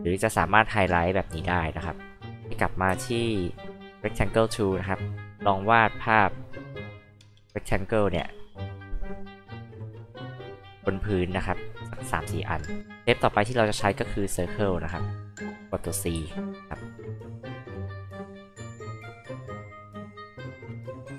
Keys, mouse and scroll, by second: 2.9 alt+h, 3.0-3.7 alt+drag, 3.7 alt+r, 4.3 alt+click, 5.5 alt+click, 6.6 alt+click, 7.8 alt+click, 8.7 alt+click, 9.7 alt+click, 13.1 alt+click, 14.6 alt+click, 16.1 alt+c, 16.9 alt+click, 17.9 alt+click, 18.6 alt+click, 19.5 alt+click, 20.5 alt+click.